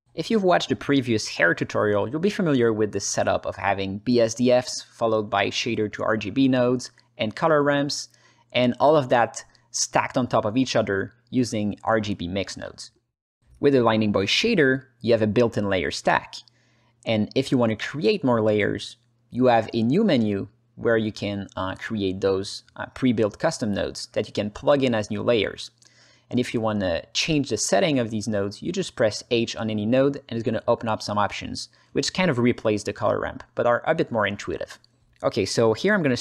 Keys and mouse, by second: 3.7 click, 5.4 click, 6.3 click, 7.3-7.8 drag, 8.0 alt+middle click, 8.6-9.0 drag, 9.3 alt+middle click, 10.0 alt+middle click, 11.8 click, 12.3 click, 13.0 click, 14.0 click, 15.6 click, 16.1 click, 16.4 click, 17.3 click, 17.6 click, 21.4 shift+a, 24.5-25.3 drag, 25.7 click, 26.9 click, 27.7 Delete, 28.2 click, 29.6 click, 30.5 h, 31.1 alt+middle click, 31.5 ctrl+middle click, 32.4-33.4 drag, 33.7-34.8 drag, 35.3 click, 35.9-36.2 alt+middle drag.